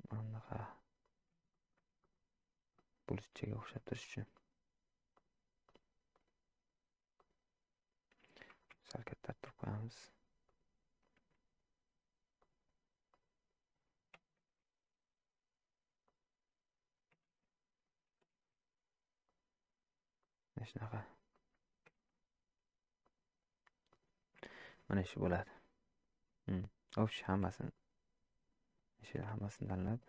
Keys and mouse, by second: 1.5 shift+middle click, 2.7 middle click, 3.5 shift+middle click, 4.4 click, 7.2 click, 17.2 shift+s, 18.4 shift+d, 21.3 click, 23.9 click, 24.5 shift+middle click, 25.1 click, 26.7-27.2 drag, 27.7-28.8 shift+drag, 29.7 ctrl+click.